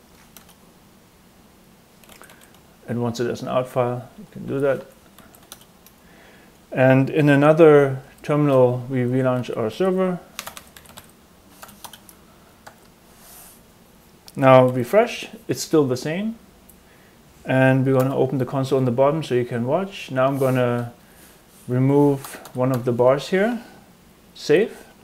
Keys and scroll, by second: 0.3 Return, 1.8-6.7 typing, 8.0 shift+super+d, 8.8-11.5 typing, 11.8 Return, 12.8 super+Tab, 14.6 super+r, 17.9 Escape, 20.9 Right, 21.7 Right, 22.2 BackSpace, 22.4 BackSpace, 22.6 BackSpace, 24.7 super+s.